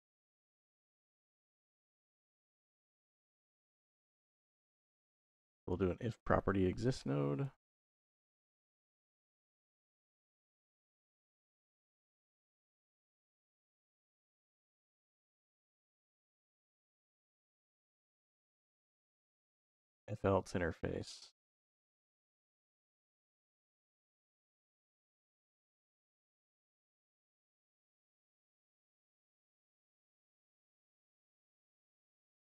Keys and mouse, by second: 4.8 click, 5.5 click, 6.2 shift+a, 7.4 BackSpace, 7.5 BackSpace, 11.3-13.0 drag, 13.4 click, 14.6-15.2 drag, 16.7 shift+a, 19.1 shift+a, 22.1 click, 23.6-24.5 drag, 25.4-26.9 drag, 27.5-28.1 drag, 28.8 middle click, 29.8-31.1 drag, 31.3 click, 32.2 click.